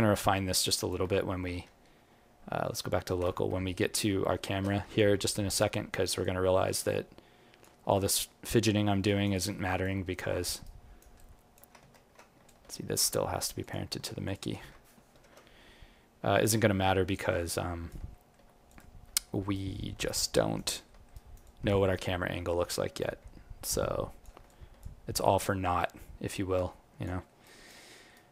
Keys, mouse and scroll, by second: 1.6 alt+q, 4.9 alt+click, 6.2 click, 7.8 alt+click, 8.7 alt+middle click, 9.0 alt+right click, 9.3 alt+click, 10.6 alt+right click, 11.1 alt+click, 11.8 ctrl+z, 12.4 alt+click, 13.6 click, 14.2 shift+click, 15.1 ctrl+p, 17.5 alt+click, 18.1 alt+middle click, 18.6 click, 19.2 alt+middle click, 19.5 alt+right click, 20.8 alt+middle click, 21.1 alt+right click, 21.4 alt+click, 22.9 click, 25.0 alt+click, 25.0 alt+middle click, 26.2 click, 27.2 alt+middle click, 27.4 alt+right click, 27.9 alt+middle click, 28.1 alt+right click.